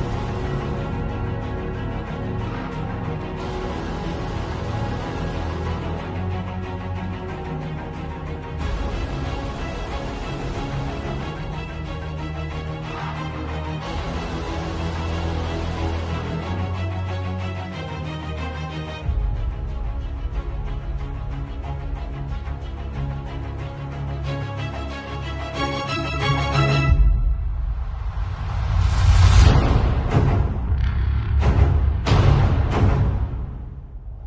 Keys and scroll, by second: 0.8 ], 2.2 ], 2.8 ], 5.3 x, 11.0 z, 12.0 v, 13.2 shift+super+a, 20.0-26.4 typing, 27.9 space, 28.2 r, 28.7 b, 29.9 space.